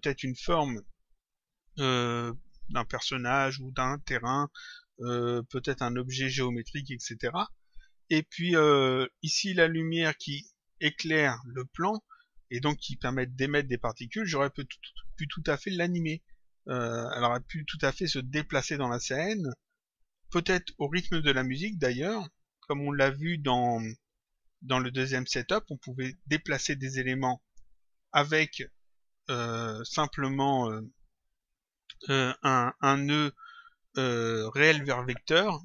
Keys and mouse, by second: 10.8 click, 32.4 click.